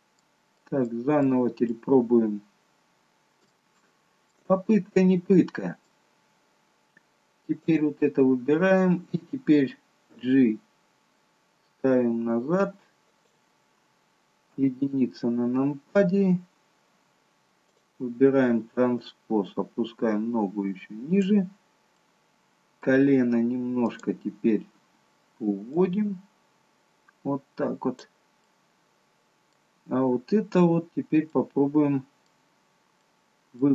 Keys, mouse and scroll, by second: 1.2 middle click, 2.0-2.7 scroll up 1, 2.7-3.3 scroll up 3, 3.4 shift+middle click, 4.9 middle click, 6.3-7.6 scroll up 2, 7.6 click, 10.0 g, 14.5 KP_1, 15.5-16.5 scroll down 1, 16.5 scroll down 2, 17.6 click, 19.0 click, 21.9 middle click, 23.8 click, 25.7 click, 28.4 middle click, 29.9-31.1 scroll down 2, 31.3 middle click, 31.3 scroll down 1, 32.4-33.0 scroll down 1, 33.0 middle click.